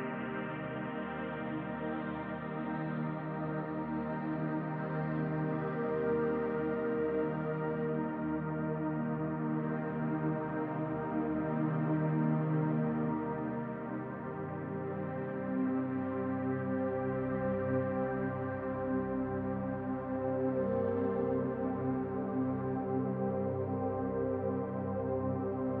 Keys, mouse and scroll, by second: 1.8 middle click, 4.5 ctrl+r, 14.2 middle click, 15.1 middle click, 18.7 middle click, 19.4 ctrl+z, 19.9 ctrl+z, 20.6 middle click, 22.0 i.